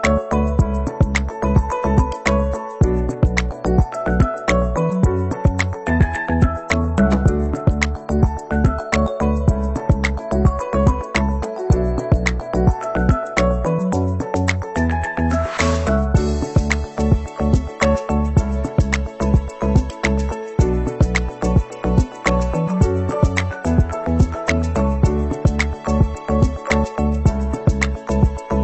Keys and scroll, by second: 20.8 ctrl+c, 21.0 ctrl+v.